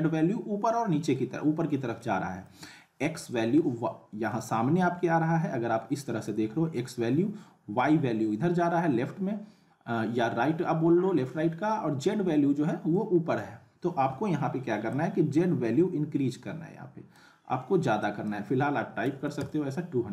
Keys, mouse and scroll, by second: 2.0-2.6 alt+middle drag, 12.3-13.5 alt+middle click, 14.9-17.4 drag.